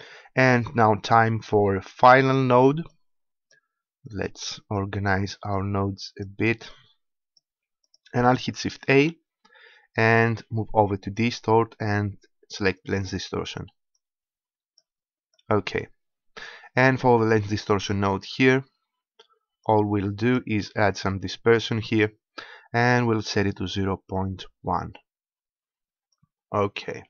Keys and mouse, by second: 1.3-9.5 drag, 8.7 shift+a, 13.7-17.1 drag, 19.4-21.3 drag, 25.9 click.